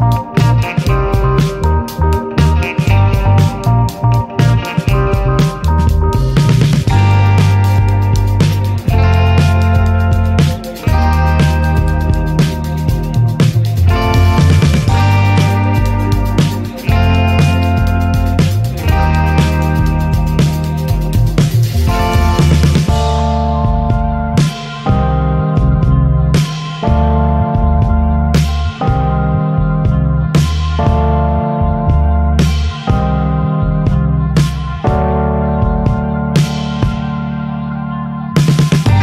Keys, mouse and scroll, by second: 0.3-1.9 drag, 2.8 click, 4.1 scroll up 4, 4.3-7.2 drag, 7.2-7.5 middle drag, 7.5-8.7 scroll up 1, 8.7 click, 11.4-13.3 drag, 14.4 click, 16.4 middle drag, 16.6 ctrl+z, 16.9 shift+middle click, 17.3 s, 20.1-20.8 drag, 20.8-22.5 shift+middle drag, 22.5 s, 26.0-26.3 middle drag, 26.3 s, 28.8-29.7 middle drag, 29.7 click, 31.1 ctrl+z, 31.5-32.6 middle drag, 33.7 click, 34.2 click, 34.7 middle click, 35.0 scroll up 3, 35.2-36.0 shift+middle drag, 36.0 ctrl+s, 36.4 middle click, 36.8 ctrl+s.